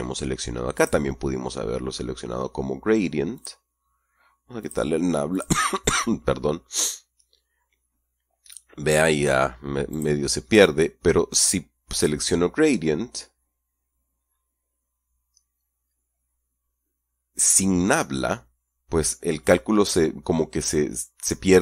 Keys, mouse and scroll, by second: 1.1 click, 3.7 click, 4.9 click, 5.7 click, 10.3 click.